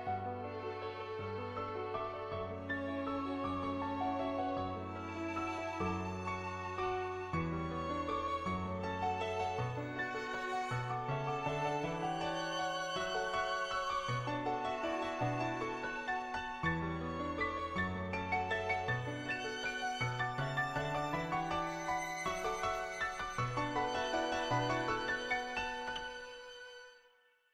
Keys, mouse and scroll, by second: 0.3-1.7 drag, 2.4-3.5 drag, 4.3 middle click, 6.6 middle click, 7.3 shift+click, 9.1 click, 9.6 ctrl+z, 10.2 [, 10.3 click, 11.0 click, 11.3 click, 11.7 click, 12.3 click, 12.8 click, 13.3 click, 15.2 click, 18.7 ], 18.8 click, 19.4 [, 19.5 click, 20.0 click, 20.5 click, 20.9 [, 21.0 click, 21.7 [, 22.0-23.1 drag, 23.5 ctrl+z, 23.7 ], 23.8-25.3 drag, 26.3 [, 26.5 click, 26.8 click.